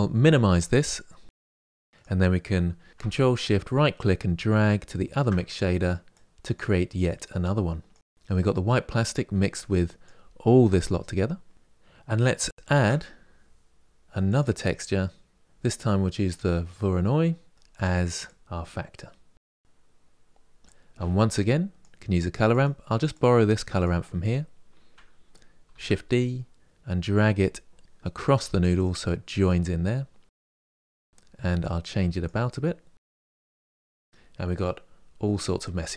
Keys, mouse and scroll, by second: 0.3 click, 2.9 ctrl+shift+click, 4.9-6.6 ctrl+shift+right drag, 6.6 drag, 9.5 click, 11.5 click, 19.5 click, 20.3 drag, 22.2 click, 22.8 click, 23.9 click, 25.5 shift+d, 30.5 click, 31.3-34.3 drag, 34.3-35.4 scroll down 1.